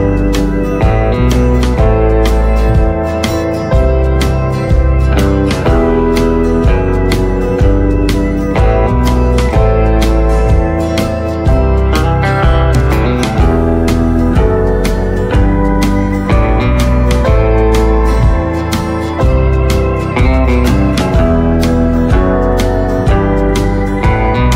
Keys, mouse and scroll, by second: 6.0 right click, 7.3-7.6 scroll down 1, 7.6 right click, 8.4-9.0 scroll up 1, 9.6-12.7 right drag, 12.7-13.0 typing, 15.3 click, 19.8 right click, 20.8 scroll up 1, 22.0 click, 22.4-22.8 scroll down 1, 23.1 right click, 24.0-24.5 scroll up 1.